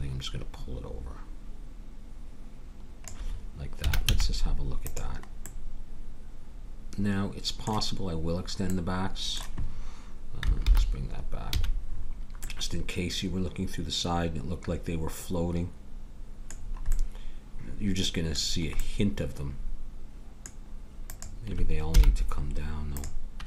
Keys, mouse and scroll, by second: 3.8 a, 4.0 z, 5.4-7.3 middle drag, 10.6 alt+h, 11.5 a, 16.5-20.9 middle drag, 21.0-23.4 drag, 21.9 h.